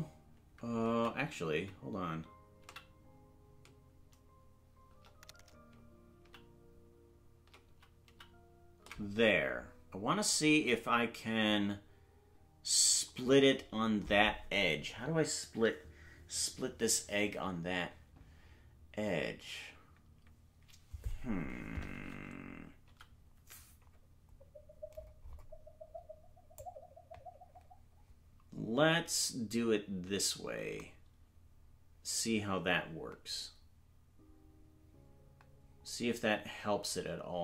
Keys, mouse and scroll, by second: 1.5 ctrl+z, 6.2 ctrl+z, 7.7 ctrl+z, 9.1 ctrl+z.